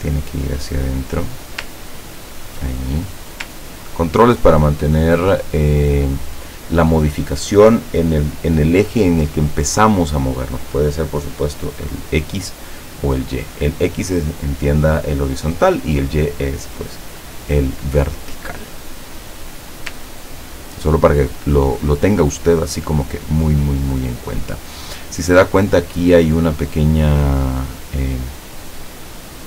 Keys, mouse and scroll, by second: 0.2-2.7 drag, 3.2 click, 3.7-5.9 ctrl+drag, 20.0-21.9 ctrl+drag.